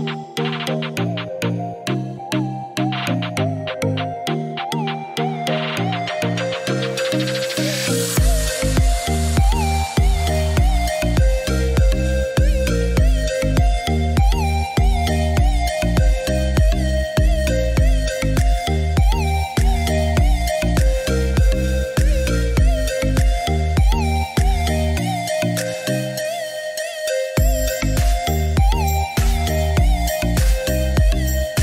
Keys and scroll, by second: 0.0 5, 0.1 4, 1.4 Return, 3.2 Escape.